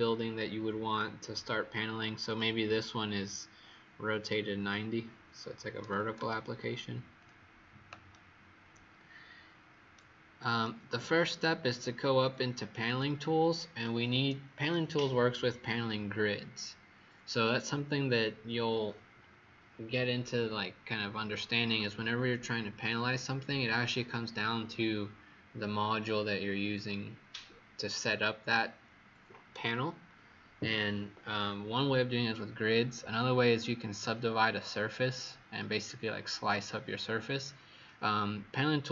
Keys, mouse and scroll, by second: 2.2 click, 5.8 KP_9, 6.1 KP_Enter, 6.1 KP_0, 7.1 click, 8.0 right click, 12.8 click.